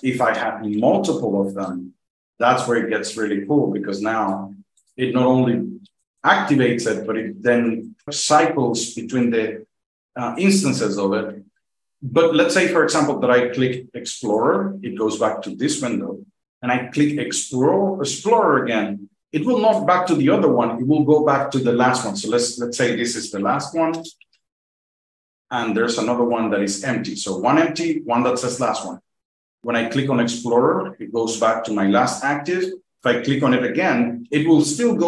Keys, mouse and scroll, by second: 0.5 n, 1.6 Return, 4.2 click, 5.8 F2, 6.5 F2, 6.9 F2, 7.2 F2, 7.5 F2, 7.6 F2, 7.8 F2, 8.0 F2, 8.2 F2, 8.5 F2, 8.8 F2, 9.0 F2, 14.2 click, 15.4 F2, 18.0 click, 20.2 F2, 22.5 click, 22.9-25.5 typing, 26.1 F2, 30.2 click, 31.2 F2, 33.2 click, 34.2 F2.